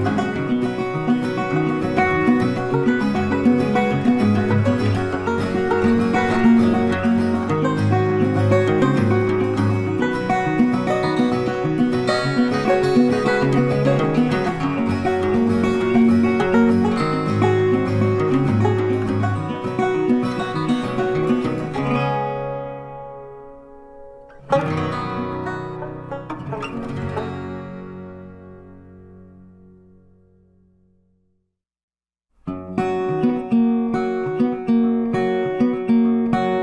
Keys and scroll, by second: 9.8 ctrl+t.